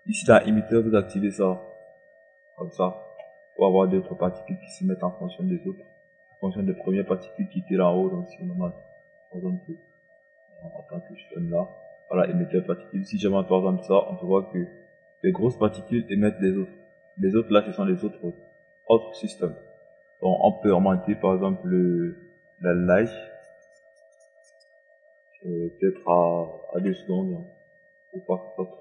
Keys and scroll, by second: 26.8 KP_2.